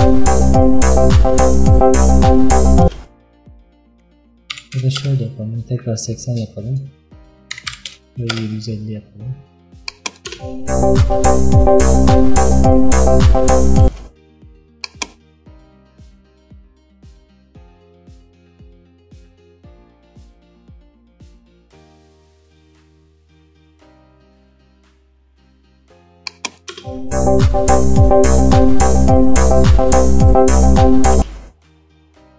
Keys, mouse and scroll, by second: 2.9 space, 5.0-10.4 drag, 10.4 space, 13.9 space, 14.9-26.8 drag, 26.8 space, 31.3 space.